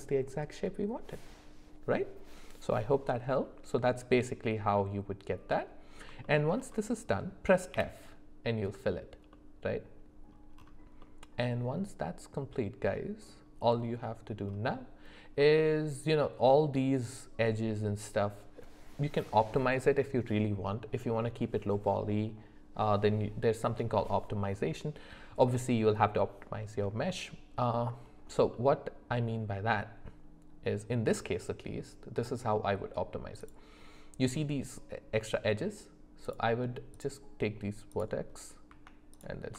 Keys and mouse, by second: 5.5 middle click, 6.2 shift+middle click, 7.1 middle click, 7.7 f, 9.3 middle click, 11.0-13.3 middle drag, 15.4 middle click, 27.1 middle click, 28.5 middle click, 33.5-38.0 drag.